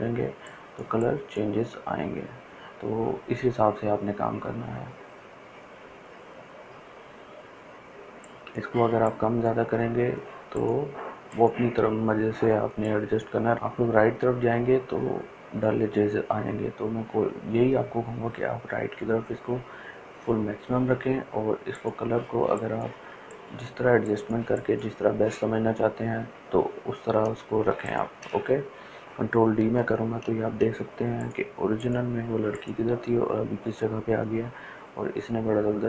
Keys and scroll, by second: 29.6 ctrl+d.